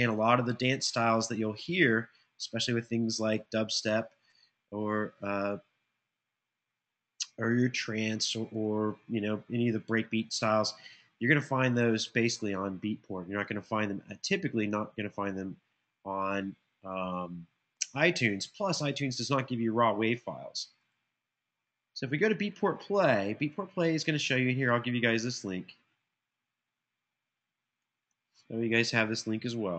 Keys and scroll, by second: 29.0 super+c.